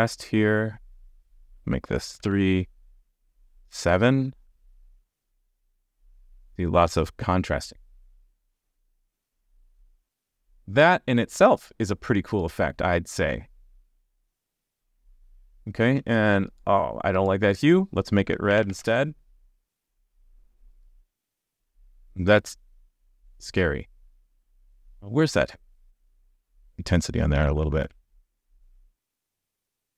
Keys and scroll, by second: 4.8 super+s, 18.7 super+s, 27.9 super+s.